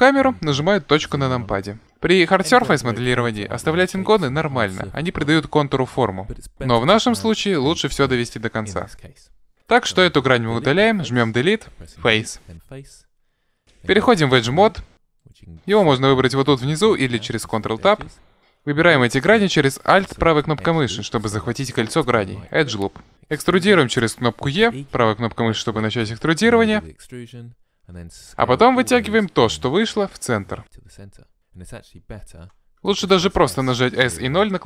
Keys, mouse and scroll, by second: 10.5 Delete, 15.2-17.0 drag, 16.6 ctrl+Tab, 19.7-21.9 right drag, 22.4-24.2 right drag, 23.2 e, 25.0 right click, 27.8 s, 32.4 ctrl+z, 33.4 s.